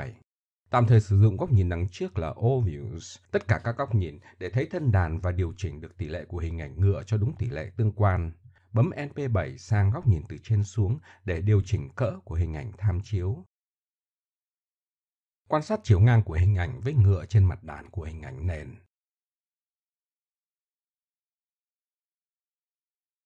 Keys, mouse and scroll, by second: 1.6-2.5 drag, 4.0 KP_7, 4.9-6.6 middle drag, 9.1 middle click, 11.5 middle click, 11.8 middle click, 12.0-13.0 middle drag, 14.5 click.